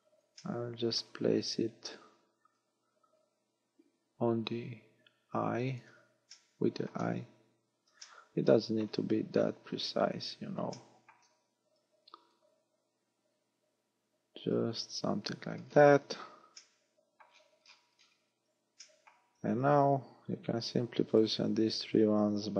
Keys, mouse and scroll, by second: 0.4 shift+middle click, 1.3-2.0 scroll up 3, 2.6 click, 6.4 shift+middle click, 7.3-7.9 scroll up 5, 8.1 shift+middle click, 9.2-10.4 scroll up 9, 10.8 shift+middle click, 12.3 click, 15.2-16.7 scroll down 16, 16.6 middle click, 17.3-18.3 scroll down 7, 18.9 shift+middle click, 19.8 z, 21.2 right click.